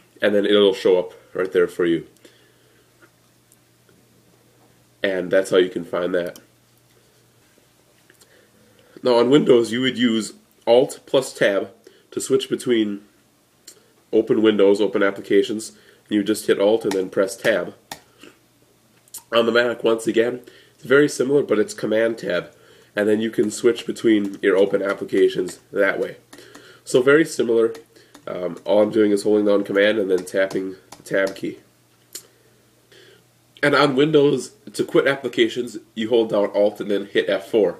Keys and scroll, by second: 17.0 alt+Tab, 22.9 super+Tab.